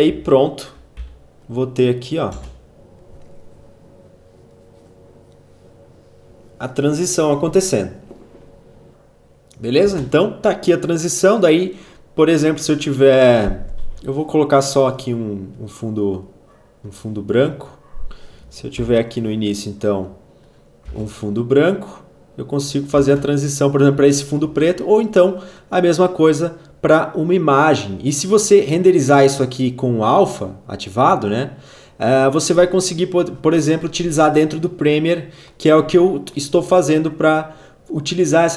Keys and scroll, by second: 0.1 v, 1.5 space, 9.8 space, 13.8 ctrl+y, 18.7 alt+], 20.8 space, 22.9 space, 24.4 ctrl+a.